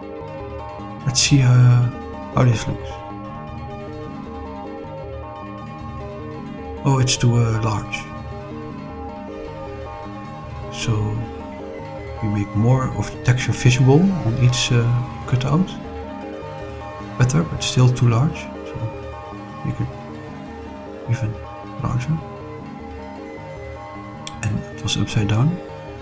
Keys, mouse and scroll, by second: 0.5 click, 5.3 click, 6.1-7.1 middle drag, 8.7 click, 10.7 s, 13.2 click, 15.3 click, 17.6 click, 18.6 s, 19.5 click, 20.4 r, 20.8 1, 21.1 8, 21.2 0, 21.5 Return, 24.0 click, 25.0-25.9 scroll up 2, 25.9-26.0 middle drag.